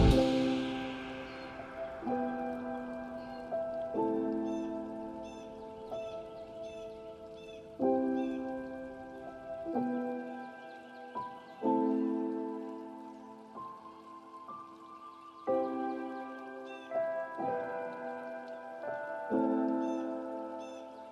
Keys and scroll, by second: 8.6 ctrl+z, 12.4 ctrl+space, 14.3 ctrl+;, 15.5 ctrl+space.